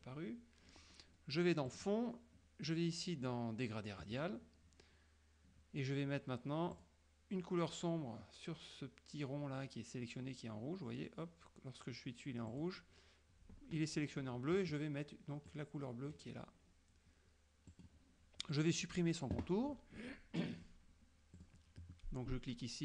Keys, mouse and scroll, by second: 1.8 click, 4.1 click, 6.8 click, 12.5 click, 15.5 click, 17.8 click, 21.4 click.